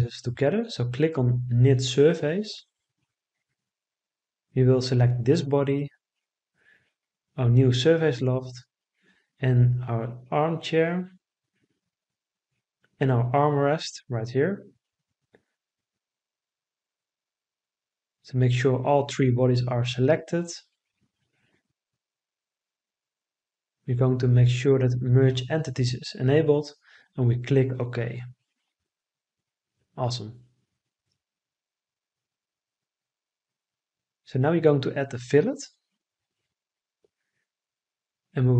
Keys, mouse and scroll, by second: 17.9 click.